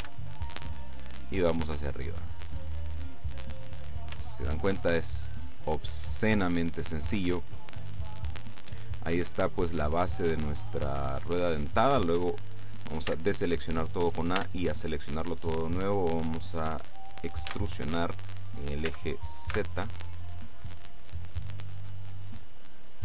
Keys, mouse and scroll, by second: 0.1 s, 2.6 click, 3.3-4.6 middle drag, 4.9 shift+click, 10.1-10.5 scroll down 2, 10.5 click, 11.2 click, 13.2 a, 14.5 a, 17.6 e, 19.0 z, 19.6 z.